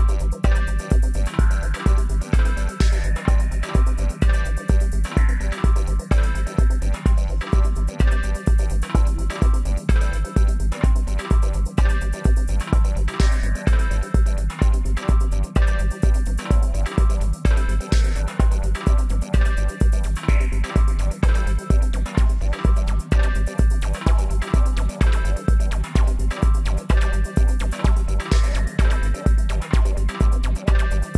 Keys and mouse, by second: 1.4 middle click, 1.5 z, 2.3-4.1 right drag, 3.1-4.9 drag, 3.9 z, 4.9 middle click, 5.1-7.8 right drag, 5.9 z, 7.0 z, 8.1 right click, 8.5 g, 9.4 click, 10.6 alt+s, 11.7 g, 14.1-15.9 right drag, 14.9 alt+s, 17.6-19.5 drag, 18.4-20.6 right drag, 19.9 alt+s, 21.7-23.6 drag, 23.6 middle click, 23.7-25.4 right drag, 24.6-26.5 drag, 26.5-27.6 middle drag, 28.4 middle click, 29.3-31.1 right drag, 31.0 z.